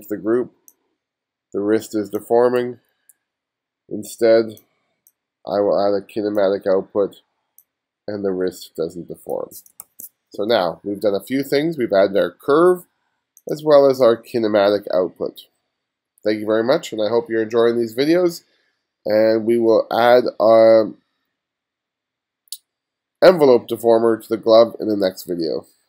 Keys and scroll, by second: 2.7 super+z, 9.9 super+z.